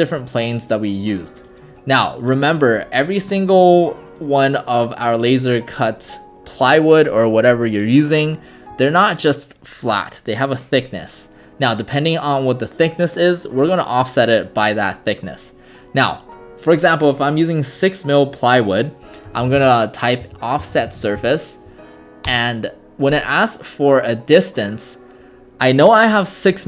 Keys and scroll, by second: 19.1-21.8 typing, 22.3 Return.